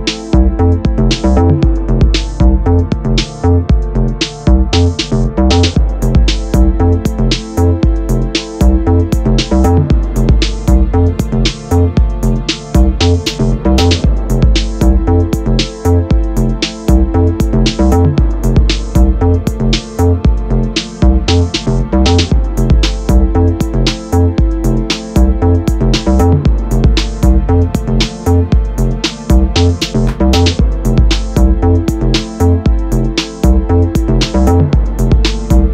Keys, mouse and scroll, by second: 1.3 middle click, 1.6 click, 1.7 middle click, 1.9-2.3 scroll down 2, 2.3 click, 2.4 scroll up 2, 2.6 Tab, 2.9 middle click, 3.1 3, 3.2 click, 3.5 middle click, 3.7 e, 4.4 alt+click, 4.6-7.6 middle drag, 5.1 alt+e, 7.6 click, 7.7 middle click, 8.4 scroll down 2, 8.5 Tab, 8.7 click, 9.1 middle click, 9.6 click, 9.8 shift+click, 9.9 shift+click, 10.9 ctrl+j, 11.1 click, 11.4 ctrl+s, 11.6 middle click, 12.2 click, 12.3-19.6 middle drag, 12.6 g, 18.6 scroll down 2, 18.8 shift+s, 19.6 click, 19.8-20.9 middle drag, 20.1 shift+s, 20.9 click, 22.1 shift+click, 22.4 right click, 23.1 click, 23.3 click, 23.6 shift+click, 23.8 right click, 26.6 click, 27.3 click, 29.2 right click, 31.1 click, 31.9-35.7 middle drag.